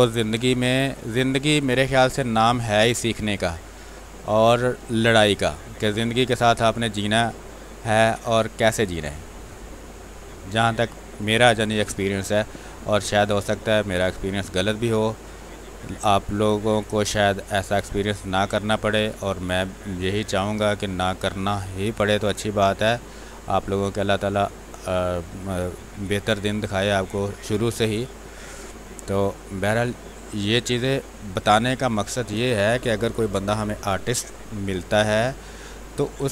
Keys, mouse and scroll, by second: 0.0 b, 0.3 space, 0.8-9.2 ctrl+drag, 11.1 space, 11.2 click, 11.7 space, 12.7-14.6 drag, 14.6-16.0 drag, 16.0 click, 17.2 click, 18.1 space, 18.3 click, 18.9 space, 19.3 click, 20.0 space, 20.2 click, 20.6 space, 20.7 space, 21.6-24.2 drag, 24.2-26.4 drag, 26.5 click, 27.1 space, 27.2 click, 27.5 space, 28.0-31.3 drag, 31.3 space, 31.6 click, 31.9 space, 34.6 space, 35.0 click, 35.2 space.